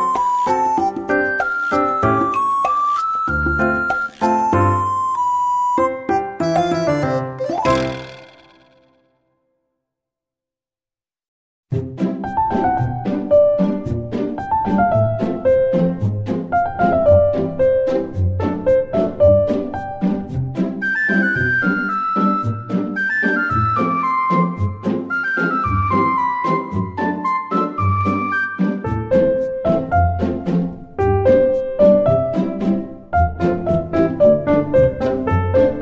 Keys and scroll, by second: 2.4 Delete, 2.7 ctrl+shift+c, 2.9 ctrl+v, 3.8 Tab, 6.0 ctrl+z, 6.3 Tab, 8.5 ctrl+z, 8.7 ctrl+z, 10.8 Tab, 14.6 ctrl+z, 15.6 9, 26.3 Tab, 26.8 BackSpace, 27.0 Return, 29.7 ctrl+z.